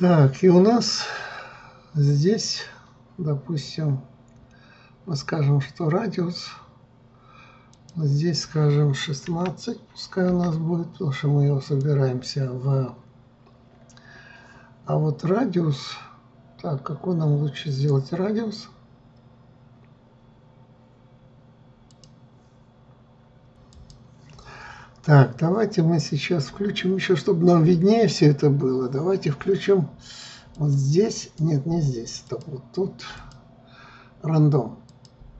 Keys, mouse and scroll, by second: 7.9-13.1 drag, 13.1 scroll, 30.7-35.3 drag.